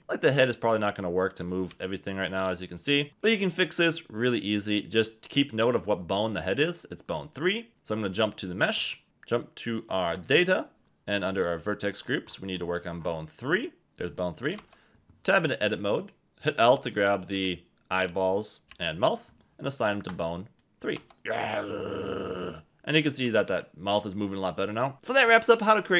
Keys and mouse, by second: 0.3 click, 1.7 r, 3.1 Escape, 7.9 click, 14.1 click, 14.6 Tab, 16.0 click, 16.2 Tab, 16.2-18.7 typing, 16.9 click, 20.1 click, 20.9 Tab, 21.2 g, 22.9 Escape, 23.5 r.